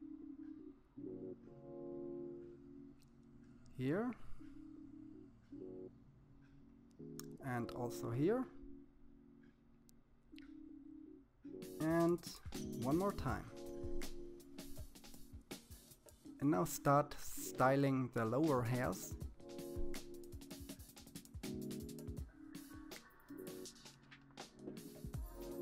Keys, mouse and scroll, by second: 0.6 click, 4.7 click, 6.4-8.0 middle drag, 12.0 click, 12.5 scroll down 3, 12.9-14.1 middle drag, 14.3 KP_3, 15.0 click, 16.7 click, 18.8 middle click, 20.1-21.1 scroll down 1, 21.1 click, 23.7 click, 25.1-25.6 middle drag.